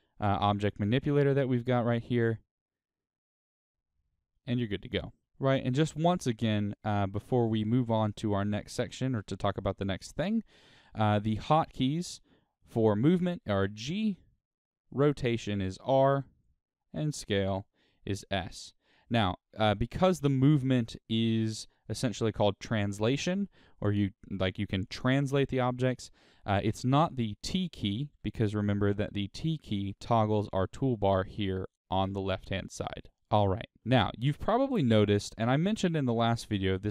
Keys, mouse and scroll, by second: 2.1-4.3 drag, 4.3-8.5 middle drag, 9.4-10.0 scroll up 1, 10.0 middle click, 11.5 shift+middle click, 13.2 g, 14.4 right click, 15.6 r, 16.4 right click, 17.6 s, 18.8 right click, 19.7-36.9 middle drag, 27.4 t, 33.7-34.1 scroll up 2.